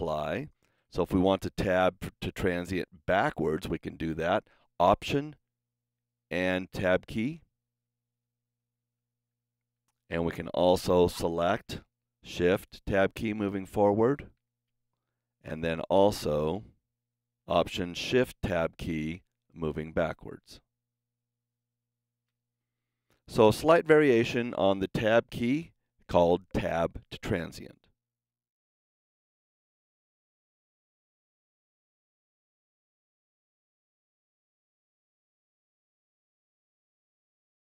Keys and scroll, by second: 5.6 alt+Tab, 12.5 shift+Tab, 13.9 shift+Tab, 14.4 shift+Tab, 18.5 alt+shift+Tab, 20.4 alt+shift+Tab.